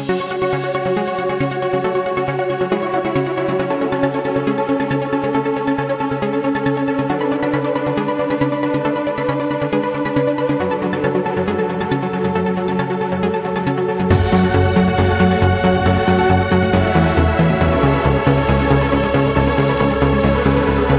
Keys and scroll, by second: 1.1 w, 8.8 q.